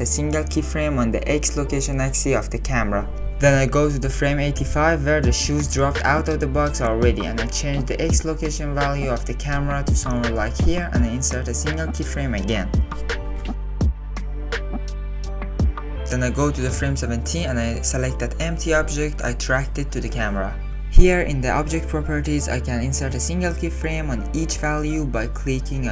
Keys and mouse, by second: 0.6 click, 2.0-2.9 drag, 4.9 click, 5.9 click, 7.5-11.2 drag, 12.4 click, 14.5 click, 14.9 space, 15.9 space, 16.6 click, 17.0 click, 18.5 click, 18.8 click, 19.3 click, 19.3-20.1 middle drag, 20.4 shift+middle click, 25.0 click, 25.4 click.